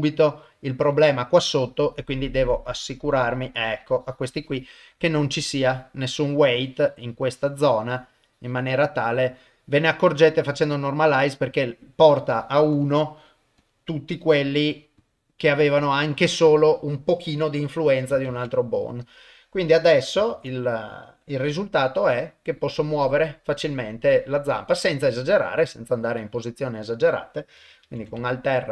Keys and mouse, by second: 1.7-4.8 drag, 5.3 click, 6.5-8.7 drag, 11.1 click, 12.7 click, 15.0 click, 18.3 ctrl+Tab, 18.9 click, 20.3 ctrl+Tab, 21.5 r, 27.8 alt+r.